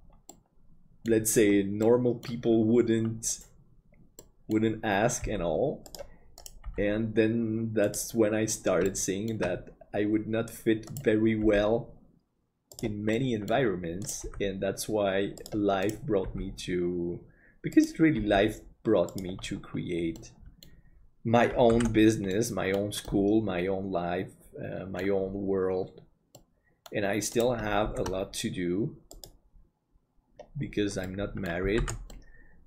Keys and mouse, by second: 0.3 middle click, 1.9 middle click, 4.3 middle click, 5.2 g, 6.4 right click, 6.6 g, 8.9 shift+middle click, 10.9 right click, 11.4 g, 13.2 middle click, 14.2 g, 20.2 middle click, 21.8 alt+a, 22.3 middle click, 23.1-25.0 middle drag, 26.4 middle click, 27.9 shift+d, 31.1 middle click, 31.9 alt+a, 32.1-32.6 middle drag.